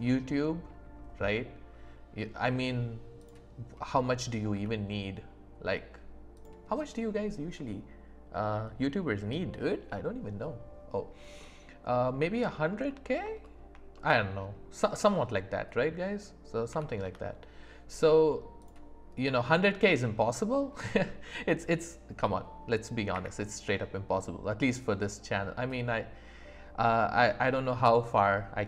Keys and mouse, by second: 3.2-4.5 drag, 4.5 s, 11.4 click, 11.4 right click, 12.9 click, 12.9 right click, 13.4 shift+click, 13.4 shift+right click, 14.0 click, 14.0 right click, 15.8 click, 15.8 right click, 16.7 s, 17.0 z, 19.3 click, 19.3 right click, 20.0 shift+right click, 23.1 q.